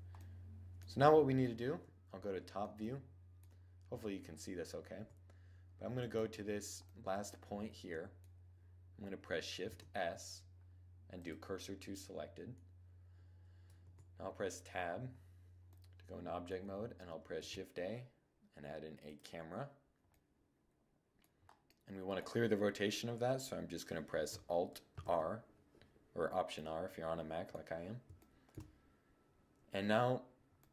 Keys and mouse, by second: 0.8 KP_7, 1.7-2.1 middle drag, 3.9 middle click, 4.3 Tab, 6.2 right click, 6.3 middle click, 6.5 right click, 9.0 shift+s, 13.2 Tab, 16.7 shift+a, 20.3 middle click, 20.4 middle click, 20.7 click, 21.1-22.7 middle drag, 24.3 alt+r, 26.1 click.